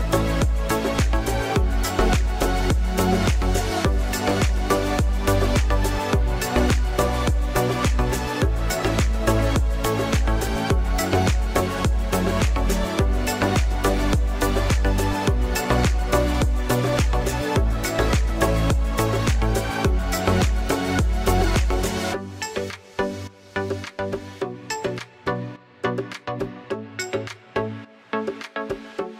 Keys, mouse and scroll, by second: 1.1 g, 4.4 click, 7.3-8.0 drag, 8.8 a, 11.3 click, 12.4 click, 12.6 click, 12.8 click, 13.2 click, 14.2 click, 14.4-23.5 drag, 25.0 click, 27.1 click, 28.3 click.